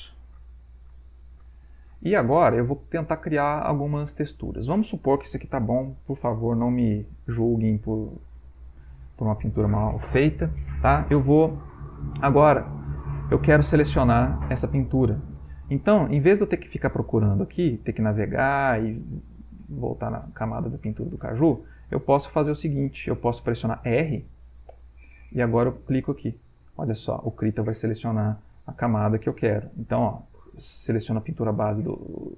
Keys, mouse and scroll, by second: 4.1-9.6 ctrl+middle drag, 18.8-20.3 drag, 21.8 click, 22.9 click, 24.7 r, 26.2 click, 29.2 r, 29.7 click.